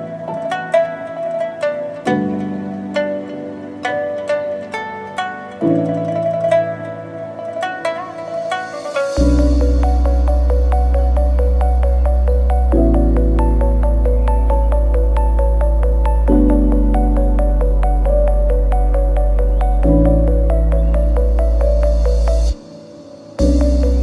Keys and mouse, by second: 0.1 ctrl+e, 0.7 a, 1.3 right click, 1.6 ctrl+z, 2.2 ctrl+e, 3.9 KP_Divide, 5.3 a, 5.7 shift+middle click, 6.0 ctrl+right click, 6.1 ctrl+e, 7.2 Tab, 10.1 Tab, 11.1 shift+middle click, 11.5-12.8 middle drag, 13.6 middle click, 14.2-17.3 middle drag, 17.6-21.9 middle drag, 23.4 a, 23.9 middle click.